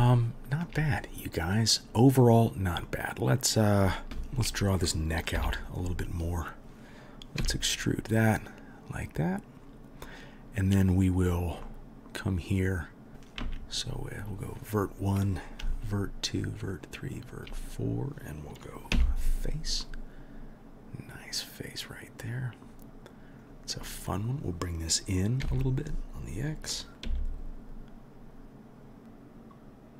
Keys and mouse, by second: 0.0-15.7 shift+middle drag, 4.1 2, 5.4 KP_3, 7.4 e, 13.4 1, 15.7 shift+click, 15.8-16.4 shift+middle drag, 16.4 shift+click, 16.5-23.4 shift+middle drag, 18.9 f, 23.4 click, 23.5-29.9 middle drag, 25.4 g.